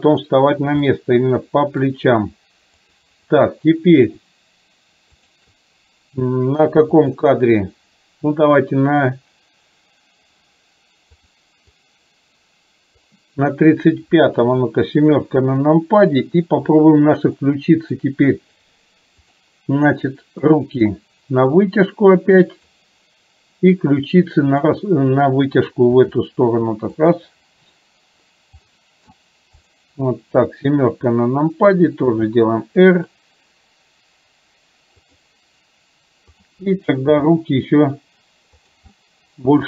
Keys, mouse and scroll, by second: 0.0 click, 1.0-1.9 middle drag, 2.9 click, 5.2 shift+click, 7.1 click, 11.2 click, 11.7-13.2 drag, 14.5 KP_7, 17.5-18.1 shift+middle drag, 19.4 click, 20.6-22.9 drag, 24.6 click, 26.0 r, 28.9 middle click, 29.6 click, 30.4 KP_7, 32.2 r, 37.2 g, 39.0-39.6 middle drag.